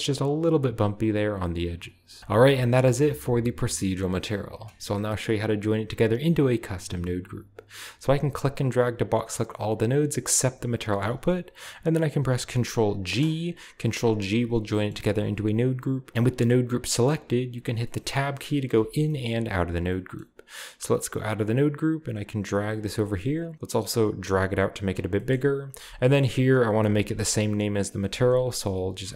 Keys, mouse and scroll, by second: 1.8 click, 2.2-2.9 scroll down 1, 2.4 middle click, 2.9-3.8 scroll up 1, 3.8-6.1 scroll up 1, 6.1 click, 8.0-10.4 drag, 13.0 ctrl+g, 14.6-16.1 scroll up 1, 16.1 Home, 16.1-16.5 scroll up 1, 16.5-17.8 drag, 18.1 middle click, 18.7 Tab, 19.1-21.1 scroll up 1, 19.4 Tab, 21.4-23.5 drag, 23.0 middle click, 23.2-23.7 scroll up 1, 24.3-26.2 drag, 25.3-26.2 scroll up 1, 26.2 scroll up 1, 26.6 ctrl+click, 26.9 ctrl+c, 27.4 click, 28.2 ctrl+v, 28.5 click.